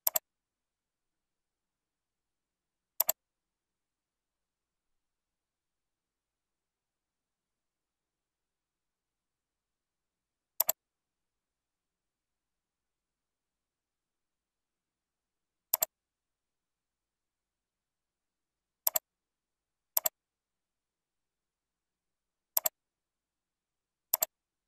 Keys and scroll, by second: 6.0 ctrl+z, 7.6 ctrl+[, 12.7 ctrl+[.